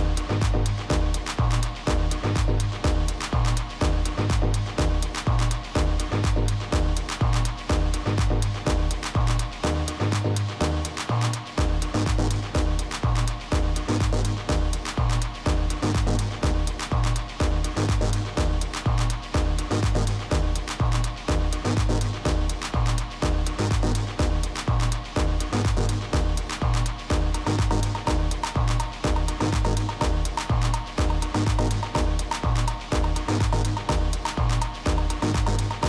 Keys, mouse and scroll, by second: 1.5 KP_3, 6.1 a, 7.5 b, 10.0-11.9 drag, 16.1 a, 17.3 b, 18.4-20.3 drag, 19.9 a, 20.8 b, 21.9-23.8 drag, 23.5 a, 24.4 b, 25.7-27.6 drag, 27.8 a, 29.9 middle click, 31.8 b, 32.9-34.7 drag, 34.8 a.